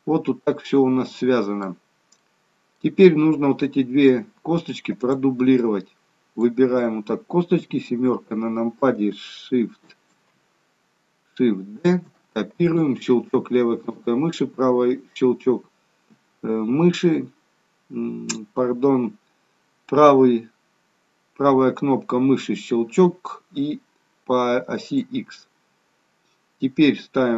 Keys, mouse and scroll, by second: 2.2 middle click, 4.9 click, 5.6 click, 7.6 KP_7, 11.9 shift+d, 14.3 right click.